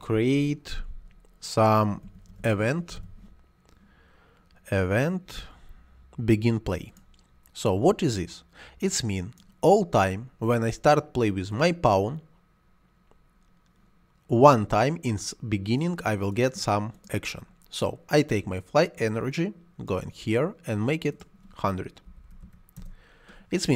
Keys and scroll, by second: 1.7-2.9 typing, 21.7-22.6 typing, 22.7 Return.